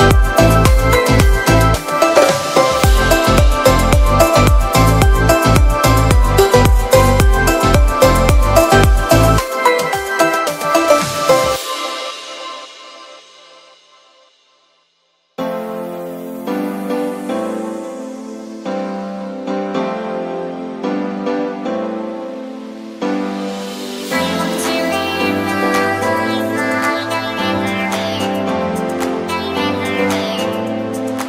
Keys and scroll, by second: 2.8 space, 24.2 super+i, 25.4 b, 26.2 ], 28.9 [.